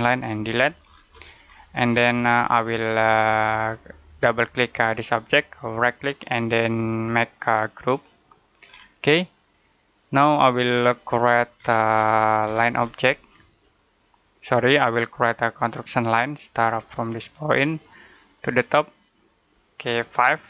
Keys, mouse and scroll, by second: 0.2 Delete, 0.7 scroll down 1, 0.9-3.1 scroll up 1, 4.2 click, 5.6 right click, 7.9 click, 8.5-8.9 scroll down 1, 8.9 middle click, 11.4-12.0 scroll down 1, 12.0-13.1 scroll up 1, 13.6 click, 17.8 click.